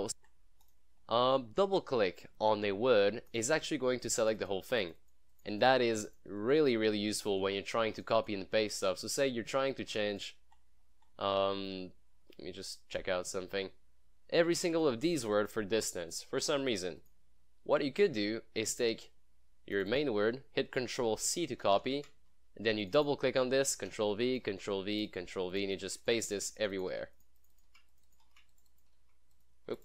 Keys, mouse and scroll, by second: 0.1 scroll up 1, 0.7 click, 3.3 click, 9.5 scroll up 1, 10.2 click, 10.6 scroll up 1, 12.3 scroll up 1, 12.4 scroll down 1, 14.6 click, 19.8 click, 21.7 ctrl+c, 22.9 click, 23.8 ctrl+v, 24.2 click, 24.4 click, 24.6 ctrl+v, 25.0 click, 25.2 click, 25.3 ctrl+v, 25.6 click, 25.8 click, 26.0 ctrl+v, 26.1 click, 26.5 ctrl+v, 26.6 click, 26.9 click, 27.1 ctrl+v, 27.2 click, 27.6 click, 27.8 ctrl+v, 27.9 click, 28.1 click, 28.3 ctrl+v, 28.6 click, 29.1 ctrl+v, 29.4 click, 29.6 click.